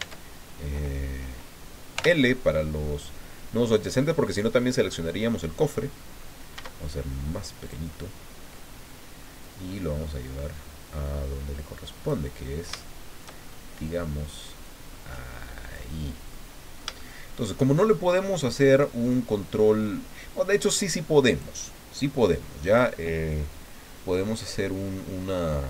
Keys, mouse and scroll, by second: 0.0 Tab, 1.9 l, 6.5 s, 7.6-8.7 drag, 9.4-12.2 drag, 12.4-12.8 scroll up 2, 12.8 shift+middle click, 13.7 scroll up 1, 14.6-15.9 drag, 16.3-17.7 middle drag, 19.3-21.6 drag, 24.5-24.8 scroll down 2, 25.1 scroll down 2.